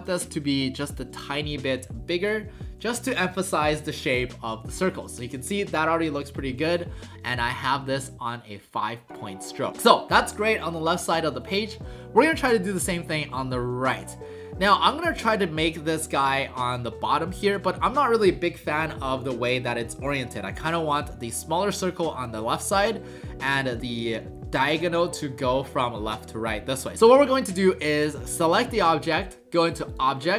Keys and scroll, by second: 1.1 w.